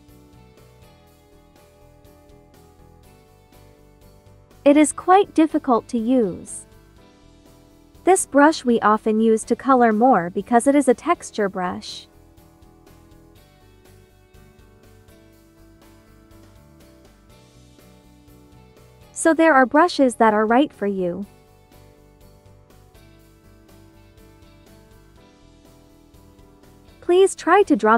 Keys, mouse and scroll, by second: 1.1 space, 1.2 click, 3.1 ctrl+z, 3.5-18.8 drag, 18.8 ctrl+z, 18.9 click, 19.7 1, 21.3-24.9 drag, 24.9 ctrl+t, 26.2-27.9 drag.